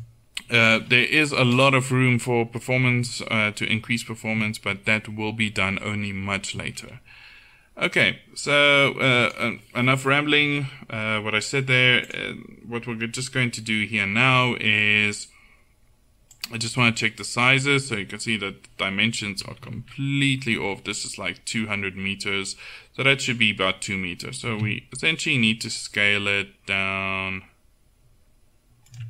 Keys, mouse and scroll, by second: 1.8-3.0 middle drag, 3.0 Tab, 7.0-8.7 middle drag, 8.7-10.7 drag, 12.1-14.6 drag, 16.4-18.7 drag, 19.6-21.7 middle drag, 24.5 s.